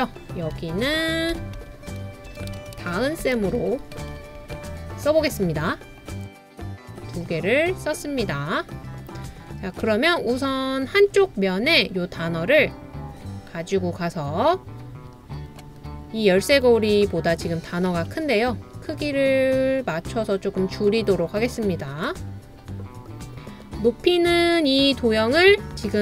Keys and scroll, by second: 0.6-5.1 typing, 2.6 super+space.